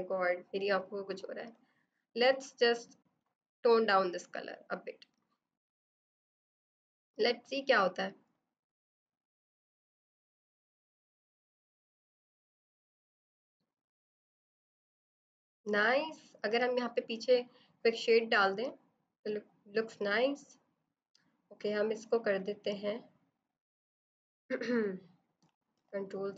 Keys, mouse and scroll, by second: 1.0 -, 1.1 click, 20.2 click, 25.4 ctrl+c, 25.7 ctrl+v.